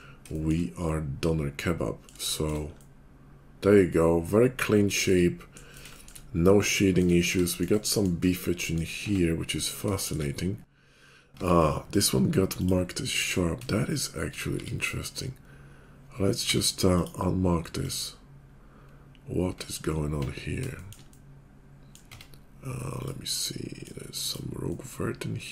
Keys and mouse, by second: 0.6-9.9 middle drag, 9.0 Tab, 9.9 shift+click, 10.2-11.8 middle drag, 11.3 Tab, 11.8 click, 12.0 middle click, 12.5 click, 12.7 middle click, 13.6 shift+click, 14.3-18.5 middle drag, 14.5 x, 16.5 q, 19.5 Tab, 20.6 shift+click, 22.1 Tab, 24.2 click.